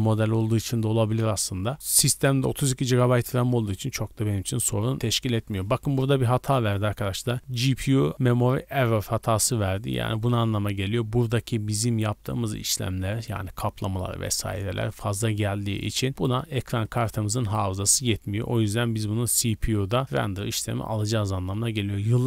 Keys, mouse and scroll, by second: 16.1 click, 16.8-18.5 drag.